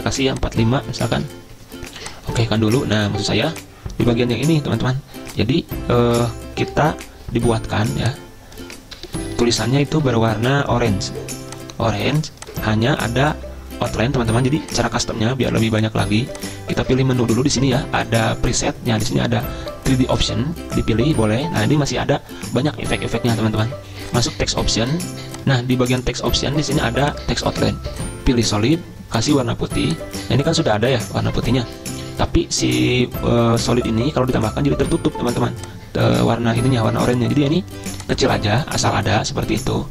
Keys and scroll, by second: 0.8-1.7 typing, 9.0 ctrl+], 9.1 ctrl+], 9.2 ctrl+], 9.3 ctrl+], 9.4 ctrl+], 10.0 ctrl+a.